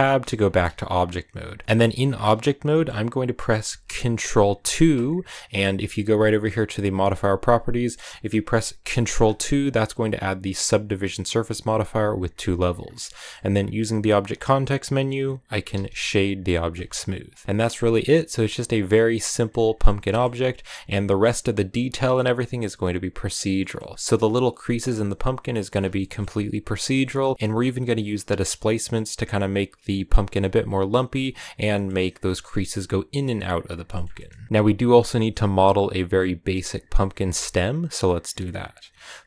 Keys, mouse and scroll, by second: 0.0 Tab, 0.4-4.5 middle drag, 4.5 ctrl+2, 6.7 click, 7.7-8.8 middle drag, 8.8 ctrl+2, 10.7-12.8 drag, 12.8 scroll up 2, 13.0-15.6 middle drag, 15.6 w, 17.1 scroll down 3, 17.2-19.4 middle drag, 19.4 a, 19.9 shift+middle click, 20.2 scroll up 3, 23.0 scroll down 1, 23.4-28.2 middle drag, 28.4 scroll down 1, 28.6-31.1 middle drag, 31.1-31.5 scroll up 1, 31.5-33.4 middle drag, 33.4-33.8 scroll down 1, 33.8-39.2 shift+middle drag.